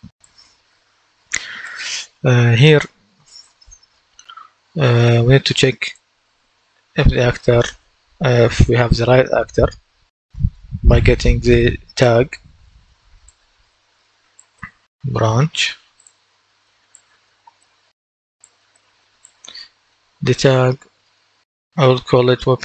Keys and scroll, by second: 6.2-7.5 typing, 10.2-11.3 typing, 14.2-15.5 typing, 21.4-22.6 typing.